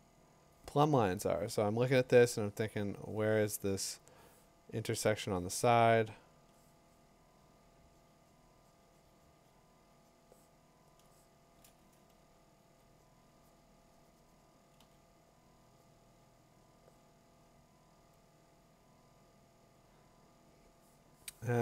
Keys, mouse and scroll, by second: 0.0 click, 0.4 click, 6.4 click, 11.0 click, 12.6 2, 12.8 7, 14.8 2.